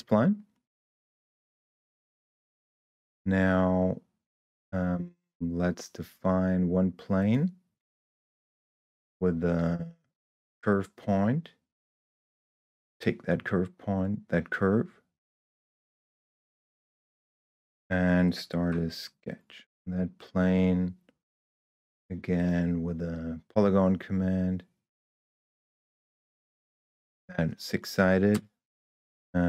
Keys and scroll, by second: 19.1 s, 28.7 Return.